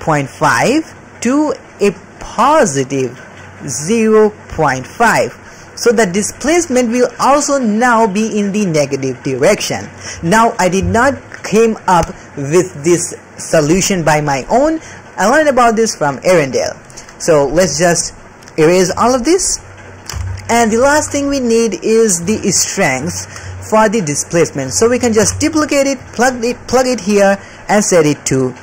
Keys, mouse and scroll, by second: 0.0-5.9 typing, 0.0 click, 0.3 click, 1.2 click, 2.6 click, 3.0 drag, 3.8 click, 4.5 click, 4.8-5.4 drag, 5.7 click, 7.0 middle click, 7.0 d, 17.2 middle click, 17.5 d, 18.9 d, 19.1 middle click, 19.5 click, 20.1 g, 20.8 alt+a, 21.1 middle click, 21.5 click, 22.2 alt+a, 23.1 ctrl+middle click, 23.5 shift+middle click, 24.0 middle click, 25.2 shift+d, 26.7-27.3 drag, 27.7-28.6 drag.